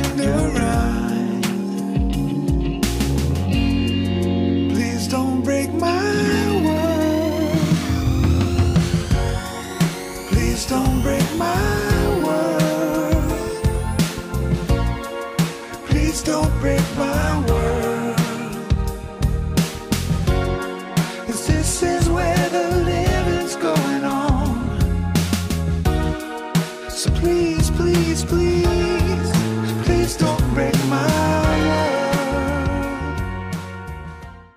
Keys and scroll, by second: 9.0 ctrl+r, 27.0 ctrl+shift+s.